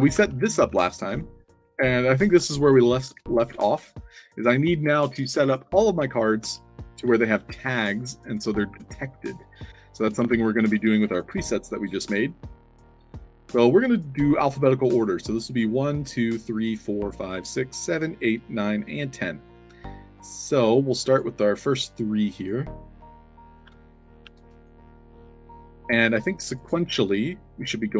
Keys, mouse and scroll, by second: 0.0-0.6 typing, 1.1-2.0 alt+middle drag, 2.1-3.9 typing, 6.1-10.8 typing, 8.2 middle click, 9.7 middle click, 20.5-21.1 drag, 21.8-22.4 drag, 22.9-23.5 drag, 24.6 middle click, 24.7-26.0 typing, 26.0 click, 26.4 click, 27.0 middle click.